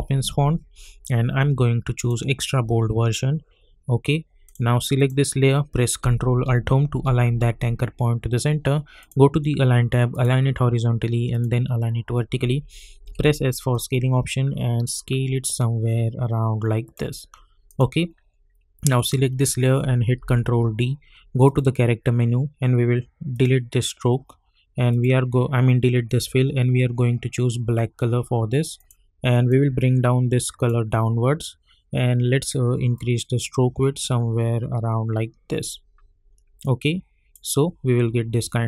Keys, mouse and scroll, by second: 0.0-0.2 typing, 1.9 click, 4.4 click, 6.9 ctrl+alt+Home, 9.0 click, 13.0 s, 13.7-17.6 drag, 20.2 ctrl+d, 21.4 click, 28.7-32.9 drag, 32.9-38.6 drag.